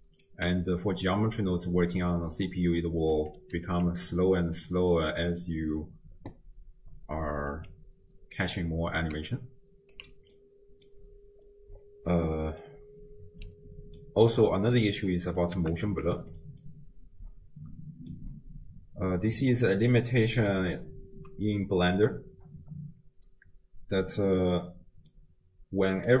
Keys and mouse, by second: 0.4 d, 2.0 d, 2.1-3.2 drag, 3.1 d, 3.3 d, 3.9 space, 7.5 space, 9.1 d, 9.3 click, 10.0 d, 10.2 d, 10.4 click, 10.5 middle click, 12.6-13.8 middle drag, 13.8 click, 13.8 right click, 14.8 click, 15.0-15.4 drag, 15.6 g, 16.3 click, 16.6-18.2 middle drag, 19.4 click, 25.1 click.